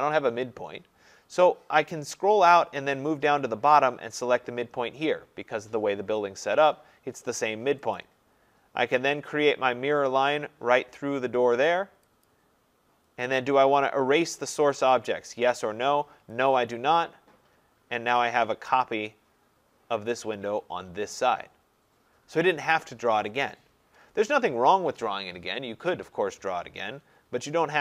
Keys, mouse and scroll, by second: 1.2 scroll, 8.0 click, 12.3 click, 16.6 click, 17.4-18.4 scroll, 24.3 middle click, 24.4 middle click.